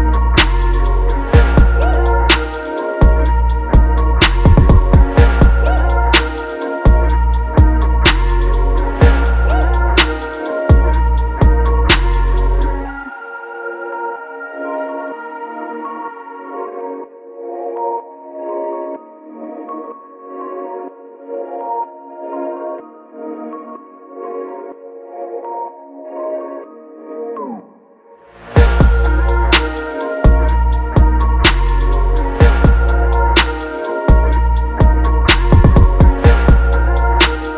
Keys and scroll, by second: 5.5 Return, 5.7 ctrl+KP_Subtract, 6.4 ctrl+t, 6.6 Down, 6.8 Right, 6.9 Down, 7.0 Return, 13.2 Delete, 16.3 alt+Delete, 17.1 ctrl+t, 19.1 Return, 21.9 ctrl+t, 22.2 ctrl+t, 23.5 ctrl+t, 24.5 Return, 26.2 ctrl+z, 29.2 typing.